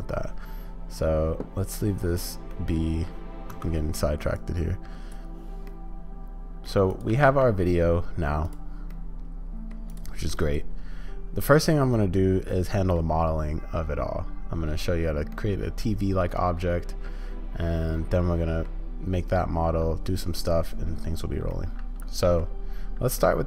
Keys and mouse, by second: 2.5 click, 3.5 space, 4.3-6.7 drag, 6.9-9.7 drag, 10.3-12.9 drag, 15.3-18.6 middle drag, 21.6 middle click, 23.2-23.4 middle drag.